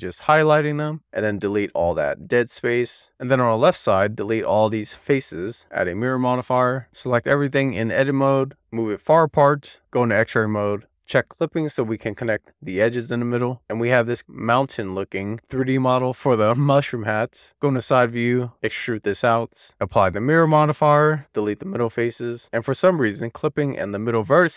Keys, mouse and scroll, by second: 0.9 right click, 1.1 x, 3.0 alt+z, 3.4 click, 4.6 x, 5.5 alt+z, 6.4 click, 6.8 click, 7.2 a, 8.5 click, 9.1 Tab, 9.6 click, 10.7 click, 11.2 click, 12.0 super+z, 15.5 middle click, 16.2 alt+middle click, 17.4 alt+middle click, 18.0 Tab, 18.6 d, 19.6 click, 20.6 middle click, 21.1 x, 22.5 middle click, 23.4-23.8 scroll up 1, 23.8-24.5 middle drag.